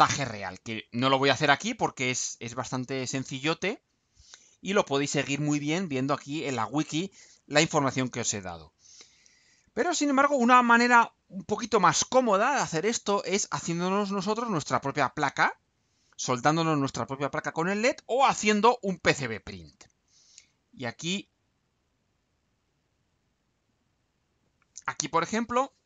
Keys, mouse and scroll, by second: 5.5-5.9 scroll up 2, 6.8-7.3 scroll down 2, 7.4-8.0 scroll down 2, 8.4-9.4 scroll down 2, 23.1 click.